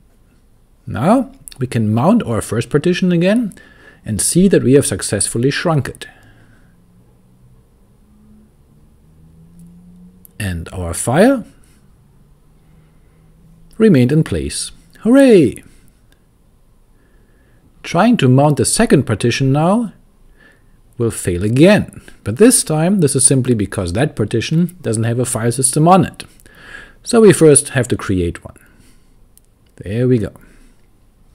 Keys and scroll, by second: 3.1-5.6 typing, 9.9-13.9 typing, 16.7-20.2 typing, 23.3-26.9 typing, 28.1 Return, 29.2-31.3 typing.